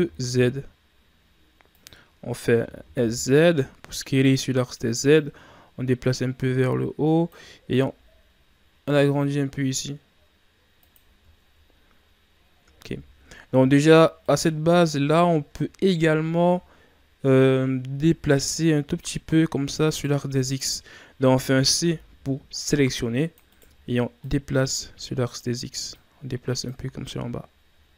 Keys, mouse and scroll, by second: 2.6 s, 5.1-7.8 drag, 7.8 s, 11.3-11.7 shift+scroll down 1, 11.7 scroll up 1, 12.8-13.8 ctrl+scroll up 5, 14.2 right click, 14.7 z, 15.3 shift+scroll down 3, 15.6-16.8 scroll up 2, 18.0 c, 20.4 right click, 21.7 c, 24.1-26.7 drag, 26.7 z, 27.0-27.4 scroll down 3, 27.9 scroll down 7.